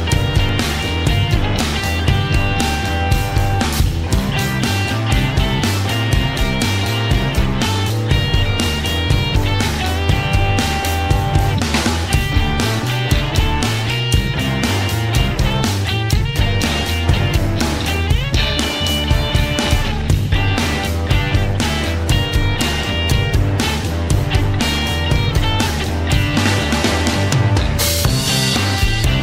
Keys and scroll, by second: 11.0 Return, 11.8-13.1 typing, 15.5 Return.